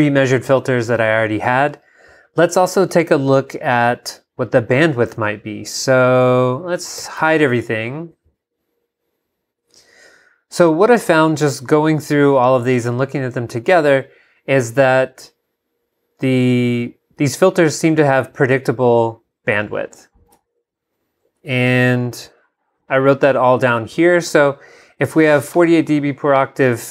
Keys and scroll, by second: 7.0 shift+super+h, 20.3 super+Tab.